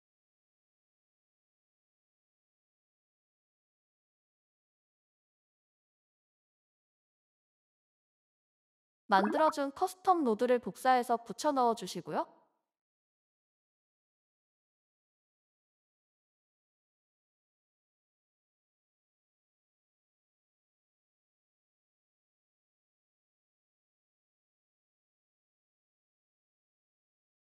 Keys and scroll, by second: 2.7 x, 4.6 ctrl+s, 13.2 ctrl+c, 15.4 ctrl+v, 22.7 q.